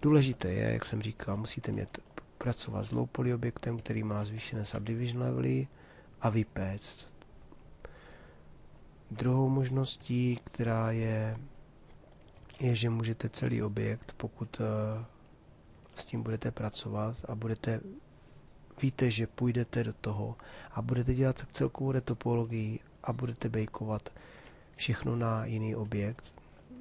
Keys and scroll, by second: 0.4 shift+d, 3.8 d, 12.1 shift+f.